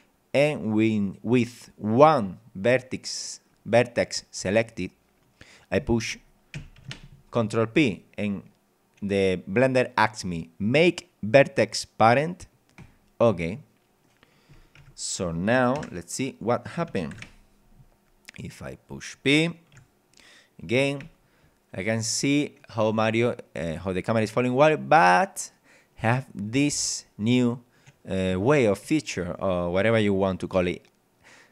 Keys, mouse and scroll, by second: 2.6-3.6 middle drag, 3.6-4.0 scroll up 2, 5.2 scroll down 2, 6.8 ctrl+p, 12.8 click, 14.0 middle click, 14.8 Tab, 15.8 KP_0, 17.1 ctrl+Up, 18.0-18.4 scroll down 2, 18.4-18.9 scroll up 2, 19.7 p, 21.0 w, 24.6 d, 26.4 w, 28.8 d.